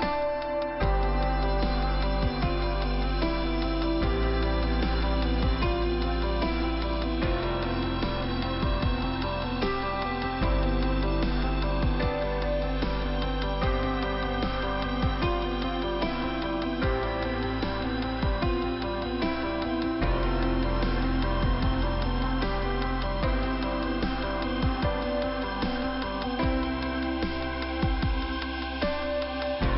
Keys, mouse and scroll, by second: 0.1 click, 0.1 click, 3.4 click, 4.3 click, 6.1 click, 6.2 click, 6.6 click, 8.5 click, 9.1 click, 10.4 click, 10.5 click, 11.1 click, 11.7 click, 16.5 click.